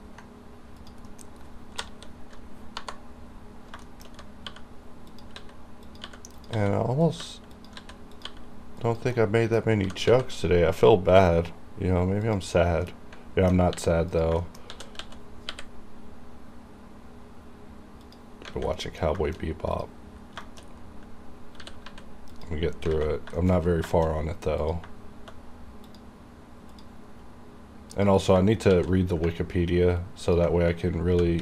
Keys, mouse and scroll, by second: 0.9 click, 1.2 middle click, 3.6 scroll up 1, 3.9 shift+middle click, 4.1-4.5 shift+scroll up 2, 4.5-8.3 typing, 5.2 click, 6.0 click, 6.4 click, 7.1 click, 7.6 click, 8.2 click, 8.9 click, 9.2 middle click, 9.9 g, 10.2 g, 12.3 click, 12.7 scroll down 1, 12.9 middle click, 13.8 r, 14.2 click, 14.5 shift+middle click, 14.8 shift+d, 15.1 x, 18.1 click, 18.5 scroll down 1, 18.6 a, 18.9 middle click, 19.3 shift+middle click, 19.8 click, 20.5 shift+middle click, 20.7 shift+scroll up 2, 21.7 r, 21.9 z, 22.4 click, 22.7 scroll down 1, 23.0 alt+a, 23.4-23.8 scroll down 2, 23.5 shift+middle click, 24.0 shift+middle click, 24.2-24.7 scroll up 1, 24.7 click, 25.9 click, 28.8 shift+d, 30.3 click.